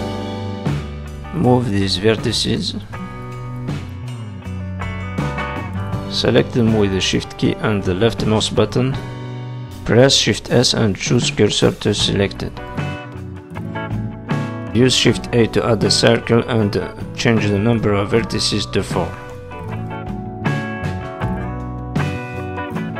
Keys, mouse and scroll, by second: 1.0 click, 1.3 g, 2.3 click, 2.5 g, 3.7 click, 3.9 g, 4.7-5.1 scroll down 4, 5.4 shift+click, 6.0 click, 6.7 click, 7.5 shift+click, 8.5 click, 10.5 shift+s, 11.9 shift+middle click, 12.3-12.7 scroll up 2, 12.7 shift+middle click, 13.2 scroll up 1, 13.5 shift+middle click, 14.4 shift+a, 18.4 click, 19.4 click.